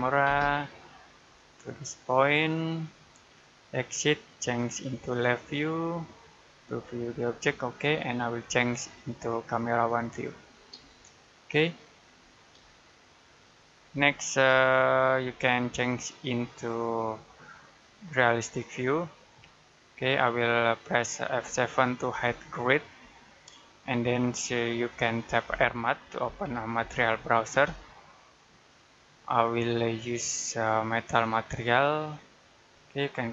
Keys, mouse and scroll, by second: 0.0-0.1 typing, 1.0 click, 10.3 scroll down 1, 10.7 middle click, 11.7 middle click, 12.0-12.4 scroll up 1, 12.5 middle click, 13.8 middle click, 14.4 middle click, 15.1 middle click, 17.5 click, 22.0 F7, 25.3-27.4 typing, 29.9 click.